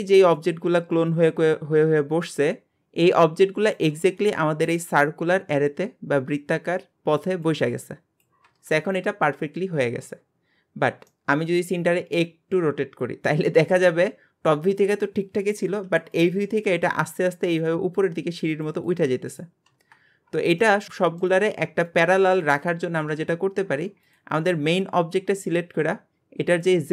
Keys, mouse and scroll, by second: 11.1-14.1 middle drag, 20.6-23.4 middle drag, 23.4-24.0 scroll up 1, 24.0 click, 26.5-26.9 drag.